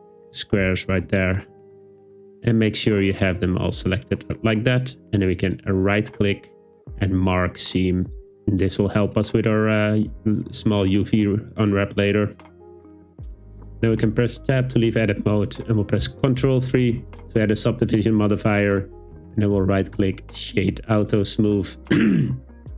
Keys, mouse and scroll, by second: 0.8 alt+shift+click, 5.7-7.3 drag, 13.9 Tab, 16.9 super+3, 19.2-20.4 drag.